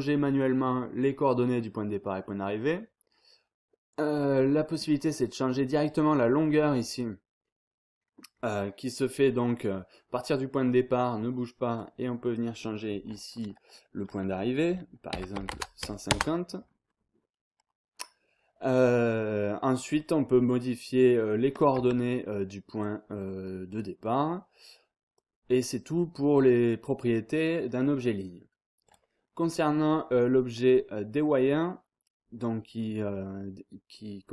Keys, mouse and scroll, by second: 4.3 click, 5.5 click, 6.4 click, 11.8 click, 15.1 KP_1, 15.3 KP_5, 15.5 KP_0, 16.1 Return, 20.0 click, 21.8 Tab, 22.7 click, 23.7 click, 25.1-26.6 drag, 28.8 click.